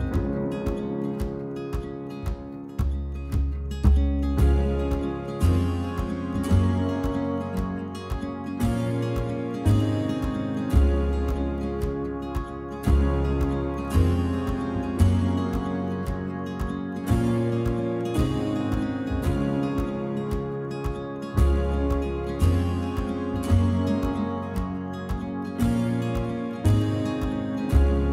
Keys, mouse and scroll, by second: 0.4 ctrl+r, 1.5 scroll up 2, 1.7-3.3 shift+middle drag, 3.3 click, 4.7-5.2 drag, 5.8 x, 6.3 alt+click, 6.8 f, 8.6 s, 9.3 middle click, 9.9-10.3 drag, 11.3 right drag, 11.4 click, 11.5-12.4 scroll down 12, 11.7 middle click, 12.4-13.4 shift+middle drag, 13.4 scroll up 2, 13.5 middle drag, 14.2 alt+click, 14.9 alt+shift+click, 15.3-16.3 middle drag, 16.3-17.2 scroll up 2, 16.5 shift+middle click, 17.2 alt+shift+click, 17.5 alt+shift+click, 18.0 alt+shift+click, 18.1 scroll down 1, 18.3-18.7 middle drag, 18.7 scroll down 2, 18.8-19.9 middle drag, 20.0 middle drag, 20.3-21.0 scroll up 3, 21.0 right drag, 21.2 click, 21.4-22.1 scroll down 2, 21.5 middle drag, 22.1-23.1 middle drag, 23.1 ctrl+r, 24.1-24.8 middle drag, 24.8-25.5 scroll up 2, 25.5 ctrl+r, 26.4 scroll down 1, 26.6-27.2 middle drag, 27.2 click, 27.3-27.8 shift+middle drag, 27.8-28.1 scroll up 1.